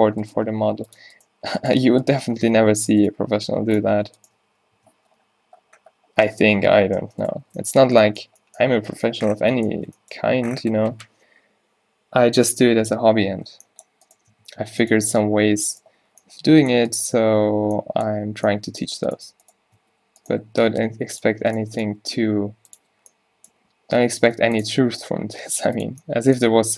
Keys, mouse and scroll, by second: 0.5 g, 1.4 g, 2.5 f, 3.3 g, 4.5 f, 4.8 Tab, 5.1 z, 6.3 Tab, 6.6 Tab, 6.7 Tab, 7.1 Tab, 7.5 Tab, 7.9 Tab, 9.8 Tab, 13.0 middle click, 13.2 z, 14.4 Tab, 14.6 Tab, 15.2 z, 16.2 z, 18.3 a, 18.4 a, 19.6 shift+Tab, 19.8 f, 20.8 g, 22.8 g, 23.0 z, 23.6 g, 25.2 g, 25.9 Tab.